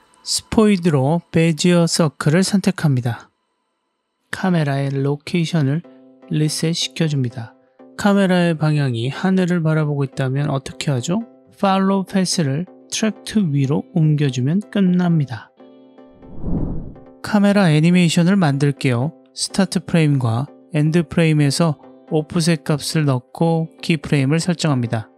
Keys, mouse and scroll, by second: 1.4 click, 4.2 scroll down 2, 4.9 middle drag, 5.4 click, 6.0 drag, 6.6 drag, 7.6 BackSpace, 8.2-8.9 scroll up 4, 8.9-10.2 middle drag, 11.1-13.7 drag, 14.5-16.5 middle drag, 17.0 click, 19.9 click, 21.9 click, 22.8-24.2 drag, 24.8-25.1 drag.